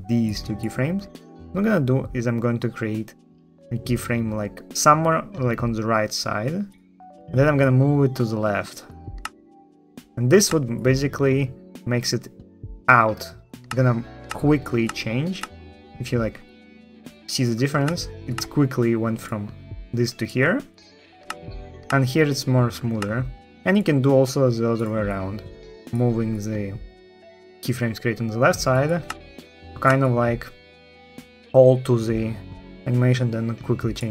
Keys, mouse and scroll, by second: 0.5 click, 6.9 ctrl+click, 8.9 space, 10.2 space, 13.4 space, 14.0 space, 14.6 space, 15.2 space, 17.6 space, 18.1 space, 21.0 ctrl+space, 21.6 ctrl+space, 22.7 ctrl+z, 23.6 ctrl+z, 28.8 space, 29.6 space.